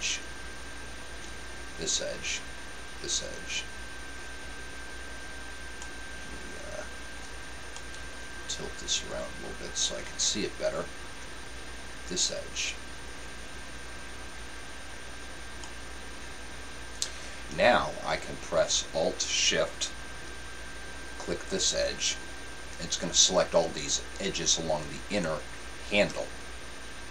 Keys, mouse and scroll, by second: 0.6-4.9 right drag, 5.8-7.6 middle drag, 7.8-9.3 middle drag, 12.3-14.0 right drag, 15.6-17.4 middle drag, 17.5-19.3 middle drag, 22.2-24.1 right drag.